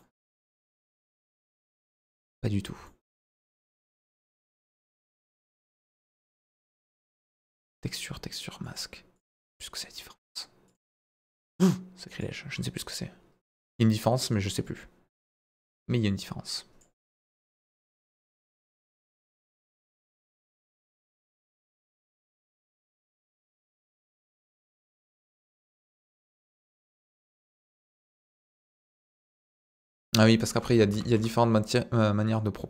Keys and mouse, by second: 0.9-1.9 drag, 2.8 middle click, 3.6 click, 4.6 ctrl+z, 5.0 ctrl+z, 6.7-7.7 middle drag, 8.7 click, 10.7 click, 12.5 click, 13.6 middle click, 13.9-15.2 drag, 15.5 middle click, 16.0 click, 17.6 click, 19.2 click, 20.2 middle click, 20.8 click, 22.0 click, 24.4 click, 25.5-27.0 drag, 27.3 middle click, 27.9-29.0 drag, 29.2 middle click, 29.9 click, 30.7 ctrl+z, 30.9 ctrl+z, 31.1 ctrl+z, 32.3-32.6 drag.